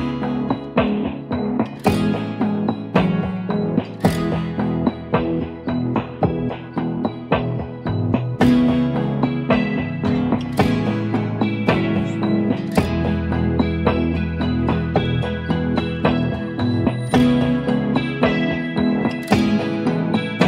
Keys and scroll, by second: 0.1-1.8 typing, 1.4 ctrl+a, 2.4 ctrl+d, 4.1 ctrl+a, 4.8 ctrl+d, 6.6-12.6 typing, 15.9-16.7 typing, 17.8-18.6 typing, 19.5 ctrl+a.